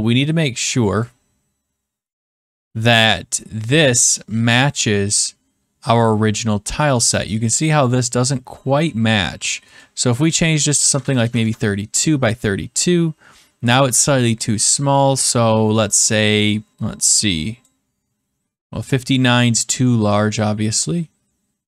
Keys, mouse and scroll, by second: 1.0 click, 6.7 middle click, 6.8 middle click, 7.2-7.6 scroll, 8.5-8.9 scroll, 9.7 click, 10.5-11.6 typing, 14.3-15.3 drag, 17.6-18.6 drag, 20.3-21.3 drag.